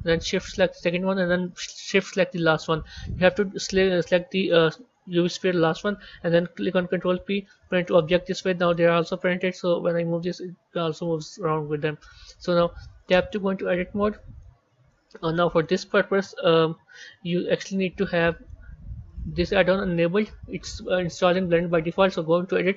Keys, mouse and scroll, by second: 0.7 shift+click, 2.3 shift+click, 6.9 ctrl+p, 8.5 click, 9.5 g, 12.3-13.0 scroll down 2, 13.0 b, 14.3-17.4 middle drag, 17.4 click, 18.1-21.2 middle drag, 21.4 click.